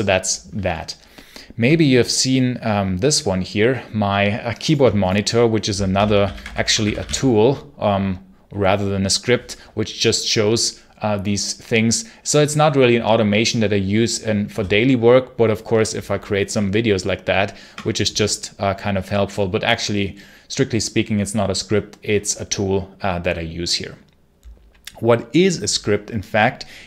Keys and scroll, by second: 5.8 ctrl+l, 5.8-7.4 typing, 16.4 BackSpace.